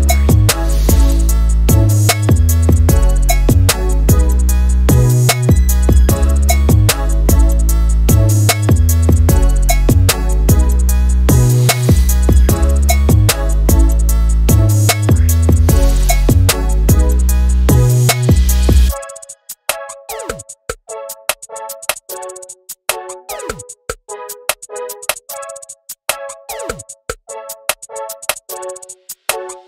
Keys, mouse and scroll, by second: 1.8 Tab, 2.0 alt+a, 2.1 right click, 2.4 alt+a, 2.5 scroll up 2, 2.6 shift+middle click, 3.3-3.7 scroll down 4, 3.9 shift+a, 4.2 ctrl+alt+KP_0, 4.4 scroll down 1, 7.8 shift+a, 8.1 g, 8.7-9.1 scroll down 5, 8.8 middle click, 9.1 middle click, 9.3 click, 9.6 KP_0, 9.9 scroll up 3, 10.1 shift+middle click, 10.4 z, 12.0-13.6 drag, 15.4-16.8 drag, 17.4 click, 19.1 click, 20.3 x, 21.5 click, 24.9 BackSpace, 25.0 Return, 25.2 alt+a, 25.6-26.4 drag, 27.1 shift+`.